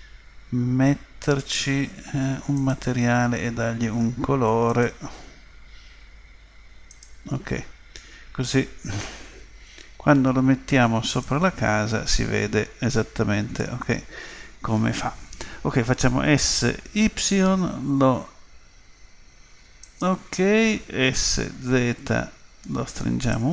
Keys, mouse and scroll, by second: 1.2-4.3 drag, 4.7 click, 11.2 click, 16.2 s, 21.1 s.